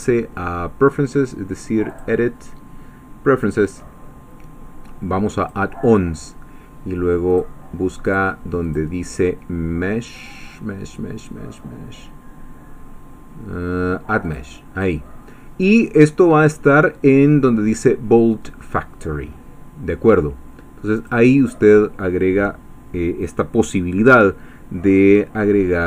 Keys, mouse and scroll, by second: 1.9 click, 3.4 click, 5.4 click, 7.3 click, 8.1 click, 8.6 click, 14.2 click, 21.0 click.